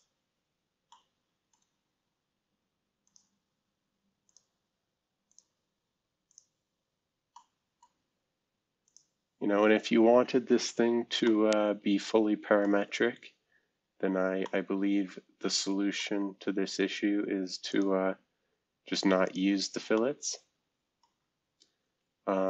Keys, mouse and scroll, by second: 0.3 scroll down 2, 0.9-2.2 middle drag, 1.8-2.4 scroll up 2, 4.2 click, 5.3 click, 6.3 click, 6.9 scroll down 2, 7.3-8.8 middle drag, 9.4-10.5 scroll down 2, 10.5-11.2 scroll up 2, 11.2-12.6 middle drag, 11.4 scroll up 1, 13.8 scroll down 2, 14.4-17.4 middle drag, 16.4-17.4 scroll up 1, 17.7 click, 19.2 click, 19.9-21.0 middle drag, 21.4-22.4 scroll up 7.